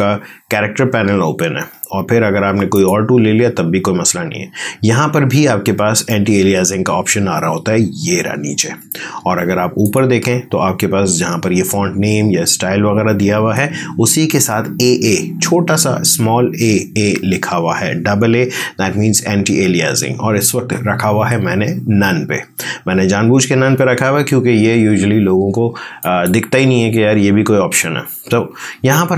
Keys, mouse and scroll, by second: 2.6 click, 9.7 click, 25.9 click.